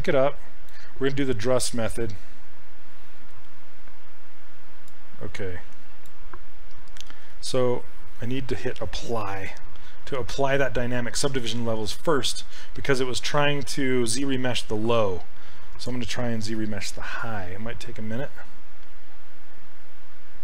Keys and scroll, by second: 7.1 ctrl+z.